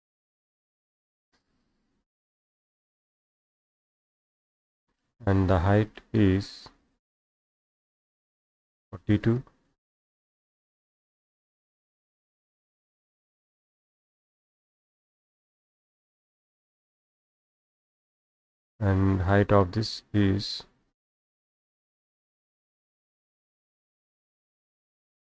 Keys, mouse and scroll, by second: 1.3-3.0 middle drag, 1.3-2.8 scroll, 3.3 middle click, 3.3-3.7 scroll, 4.2 middle click, 4.2 scroll, 6.8 click, 8.1 click, 8.7 click, 9.5-10.5 typing, 12.1 middle click, 12.1-12.6 scroll, 12.7 scroll down 1, 12.9 Escape, 14.4 click, 14.5 Escape, 14.7 scroll down 1, 14.8 scroll down 1, 14.8-15.3 scroll down 1, 15.3-16.4 scroll, 15.3 middle click, 16.1 middle click, 16.8 middle click, 16.8 scroll, 17.6 middle click, 17.6 scroll, 18.0-19.2 scroll up 2, 19.6 click, 22.1 click, 24.7 click.